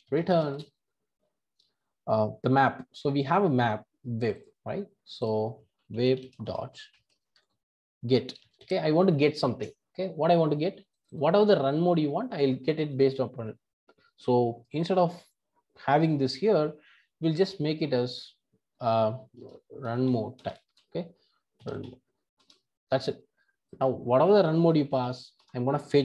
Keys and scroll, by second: 20.4 Return, 25.3 Return.